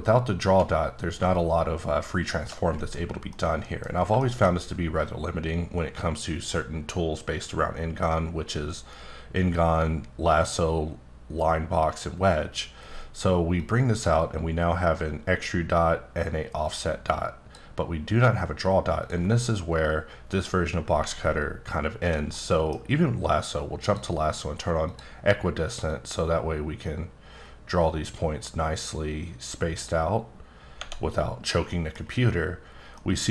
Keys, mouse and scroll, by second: 1.3 shift+click, 3.3 middle click, 4.6-6.3 scroll up 1, 13.6 click, 16.6 click, 19.0 click, 21.2 alt+scroll up 1, 21.8-22.2 alt+scroll up 1, 22.3 middle click, 23.8 click, 24.8 click, 25.9-29.9 drag, 30.8 Tab, 31.7 middle click, 32.9 middle click.